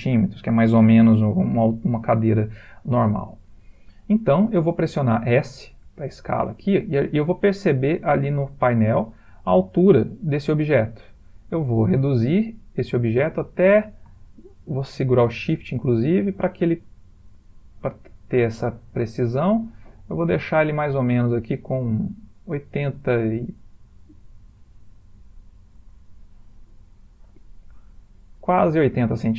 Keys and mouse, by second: 5.8 s, 27.9 ctrl+middle click, 28.8 shift+middle click.